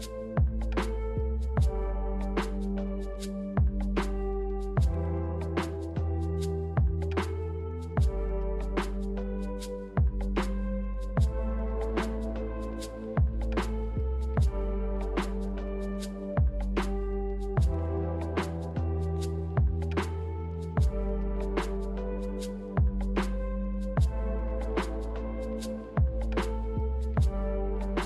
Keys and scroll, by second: 0.9 ctrl+h, 1.4 ctrl+h, 7.9-8.5 typing, 10.1-10.9 typing, 18.1 ctrl+h, 18.7 ctrl+h.